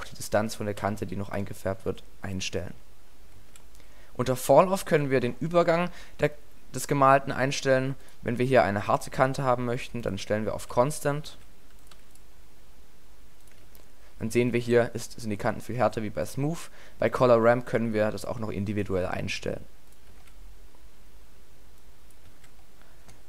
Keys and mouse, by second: 2.7 alt+a, 3.4 alt+a, 4.2-6.8 middle drag, 10.6 alt+a, 11.3 alt+a, 13.7 alt+a, 14.5 alt+a, 20.2 alt+a, 22.3 alt+a.